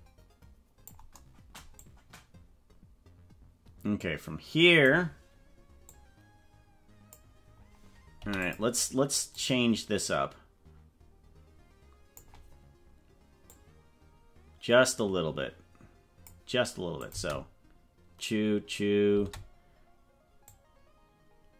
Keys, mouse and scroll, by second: 1.8-4.9 drag, 5.9-7.1 drag, 8.2 i, 9.3-12.3 drag, 13.5-16.3 drag, 17.1 click, 17.1 space, 19.1 space, 20.5-21.5 drag.